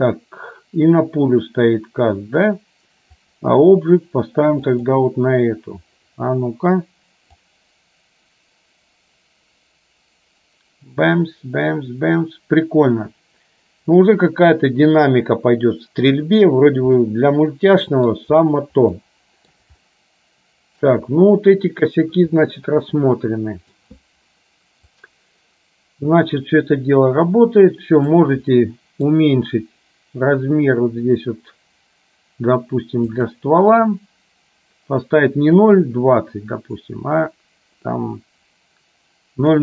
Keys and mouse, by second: 3.4 click, 7.5-16.4 drag, 17.0-18.3 middle drag, 19.1 middle click, 19.9-20.9 shift+middle drag, 22.6-23.9 middle drag, 25.1-28.4 drag, 28.8 middle click, 33.3 click, 35.8-39.6 drag.